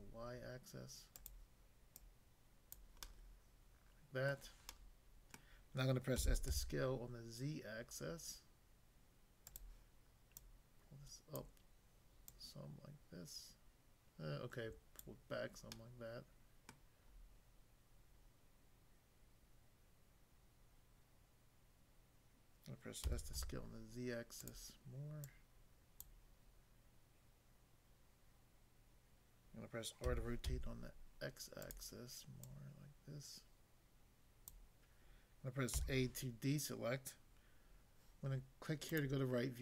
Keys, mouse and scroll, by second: 1.1 click, 1.9 click, 2.7 click, 3.0 middle click, 4.3 middle click, 4.7 middle click, 5.4 middle click, 6.1-6.5 typing, 9.5 click, 10.3 click, 11.4 click, 12.3 click, 15.1 click, 15.8 middle click, 16.7 middle click, 18.2 scroll down 1, 23.1 typing, 24.3 click, 25.3 click, 26.1 click, 30.0-30.4 typing, 31.7 click, 32.5 click, 34.5 click, 35.7 a, 38.9 click.